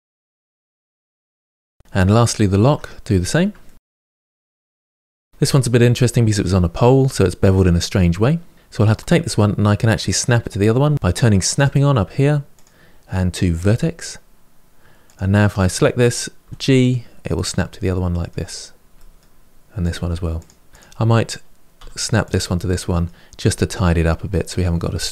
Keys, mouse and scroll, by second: 0.0 g, 0.1 middle click, 0.3 click, 0.4 click, 0.5 g, 0.6 middle click, 0.8 click, 0.9 g, 1.1 Tab, 1.1 middle click, 1.3 scroll down 2, 1.3 middle click, 2.1 click, 2.3 Tab, 2.4 scroll up 3, 2.6 shift+middle click, 3.0 click, 3.4 ctrl+b, 4.1-4.7 scroll up 2, 4.3 middle click, 4.7 middle click, 11.5 click, 12.4-15.0 drag, 16.3 g, 17.7-19.7 middle drag, 19.7 click, 19.8 g, 20.5 middle click, 20.7 click, 21.6 g, 22.5-25.1 middle drag.